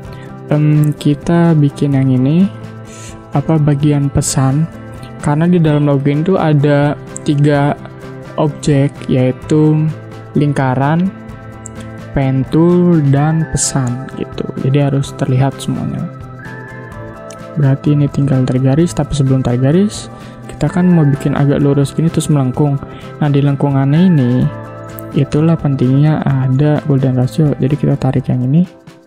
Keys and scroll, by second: 2.5 p, 3.3 v, 3.5 space, 5.7 ctrl+0, 16.3 p, 18.2 space, 20.3 v, 20.7 space, 24.9 space, 26.7 space.